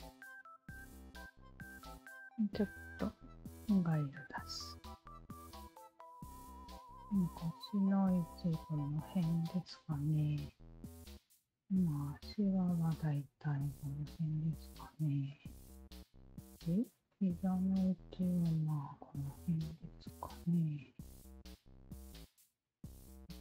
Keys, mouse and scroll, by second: 0.1 alt+right click, 0.3-1.7 alt+drag, 3.6 click, 4.7 alt+middle click, 4.9 click, 6.5 alt+click, 8.0-9.5 alt+drag, 10.6-12.8 alt+drag, 13.5 alt+click, 14.2-15.3 drag, 16.2 shift+q, 17.1 alt+click, 18.0 alt+click, 19.4 shift+q, 21.1 r, 22.0 click.